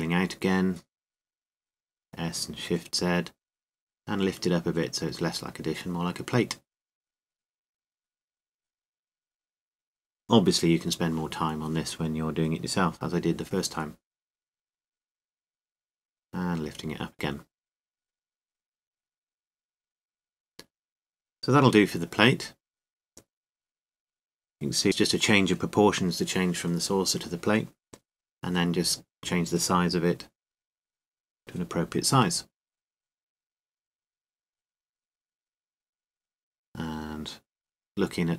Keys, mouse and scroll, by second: 1.6 s, 4.7-7.5 drag, 8.0-10.0 middle drag, 12.1 s, 14.8-16.0 drag, 16.0-17.3 middle drag, 17.4-19.2 drag, 20.7 middle click, 21.4 Tab, 24.8 click, 24.9-26.3 middle drag, 28.4-29.6 middle drag, 29.9 middle click, 30.2 middle click, 32.1 s, 33.8-35.8 drag, 35.8 middle click, 37.2 KP_0.